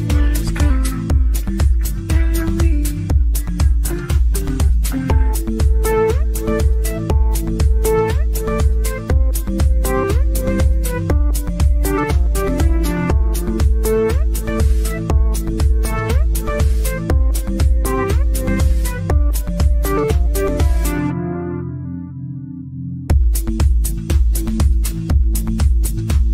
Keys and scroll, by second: 1.7 ctrl+z, 3.6 ctrl+z, 25.8 ctrl+z.